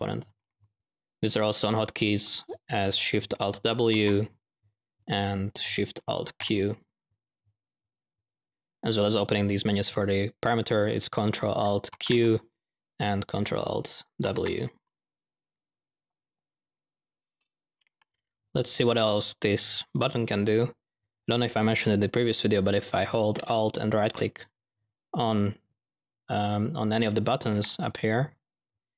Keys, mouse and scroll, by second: 0.8 typing, 3.7 alt+shift+w, 6.1 alt+shift+q, 6.9 q, 11.9 ctrl+alt+q, 13.3 ctrl+alt+click, 14.2 ctrl+alt+w, 15.0 w, 24.4 alt+middle click.